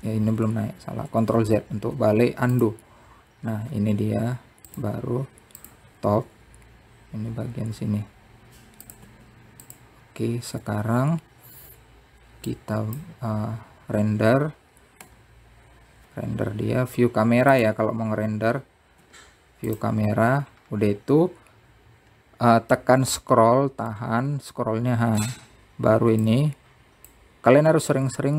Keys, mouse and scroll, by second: 0.3 ctrl+z, 3.0 r, 5.5 r, 11.8 click, 12.5-13.4 scroll up 3, 13.4-14.3 scroll down 1, 23.2-25.5 middle drag, 25.5-28.3 drag.